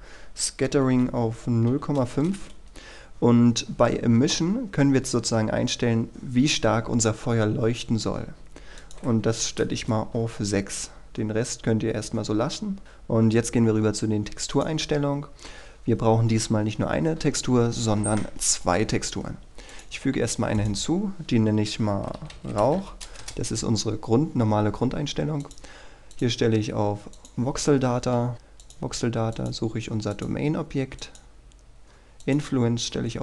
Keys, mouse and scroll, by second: 1.8 KP_5, 2.3 Return, 8.9 click, 9.4 KP_6, 9.9 Return, 12.2-12.8 scroll down 1, 12.8-21.8 drag, 22.1-23.4 typing, 25.6 click, 28.3-28.8 scroll down 1, 28.8 click.